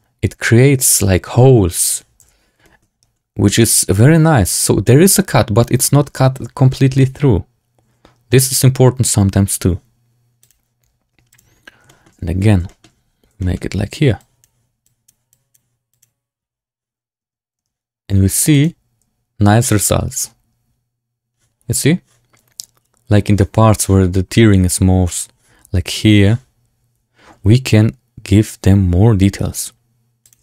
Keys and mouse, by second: 1.8 click, 2.1 z, 2.6 shift+middle drag, 3.5 click, 5.7 shift+middle drag, 6.9-9.5 middle drag, 10.3 click, 11.2 click, 11.8 shift+click, 12.6 shift+click, 13.3 shift+click, 14.1 click, 14.8 click, 15.2 click, 17.1 Tab, 17.5 Tab, 18.4 click.